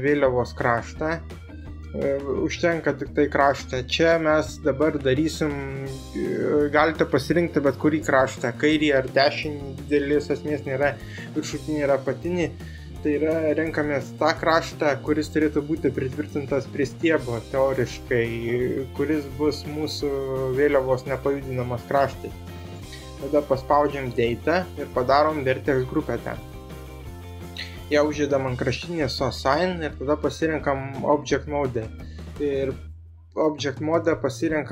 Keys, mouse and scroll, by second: 0.2 click, 0.7 right click, 1.3-4.9 drag, 24.8 click, 32.3 click.